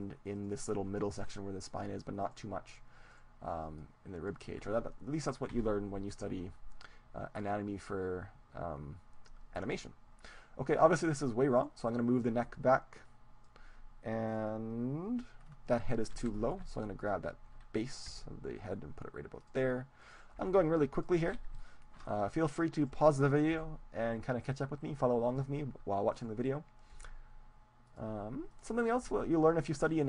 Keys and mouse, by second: 0.3-5.1 right drag, 3.9-5.6 drag, 5.6 KP_3, 7.5-9.5 right drag, 11.5-13.5 right drag, 12.7-14.1 drag, 14.5-16.3 right drag, 15.4-18.3 middle drag, 17.1-18.3 drag, 17.1-18.9 right drag, 18.3 g, 19.6-23.1 drag, 19.9 right click, 20.1-21.7 right drag, 20.5 g, 21.6 middle click, 22.8 middle click, 23.1 right click, 23.7 g, 23.9 middle click, 25.4-27.4 drag, 26.1 right click, 27.0 g, 27.4 right click, 27.9-29.9 drag, 28.5-29.7 right drag, 29.1 g, 29.9 right click.